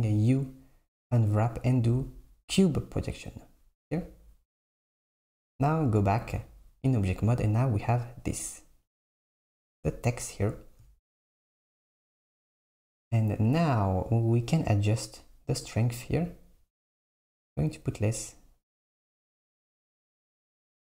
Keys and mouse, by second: 0.0 u, 5.4 Tab, 16.3-20.3 shift+drag.